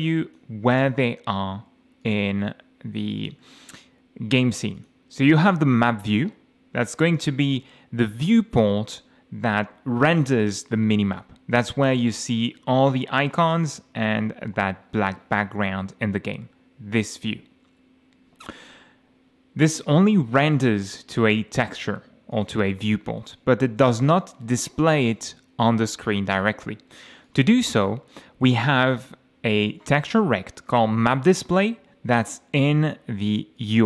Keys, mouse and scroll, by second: 2.0 click, 3.2 click, 4.8 click, 6.9 middle click, 7.5-8.0 scroll down 2, 8.3 middle click, 12.5 F5, 13.7 m, 15.4 m, 17.7 F8, 21.7 click, 22.3 click, 27.2 click, 27.9-28.2 scroll down 2, 28.9 click, 33.6 click.